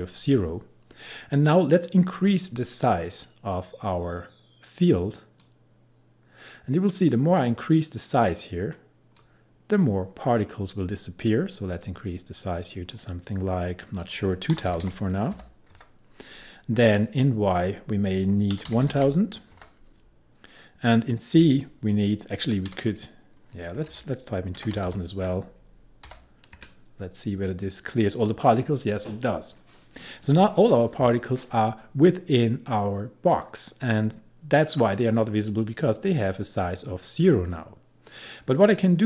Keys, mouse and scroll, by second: 3.2-14.0 drag, 14.4-15.9 typing, 18.4-20.1 typing, 22.8-26.6 typing, 34.7-36.1 scroll down 1.